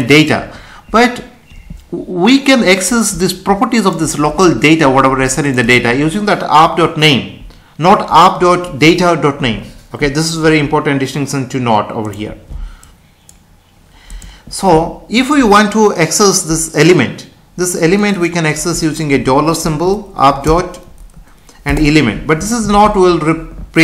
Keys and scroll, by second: 22.6 ctrl+s.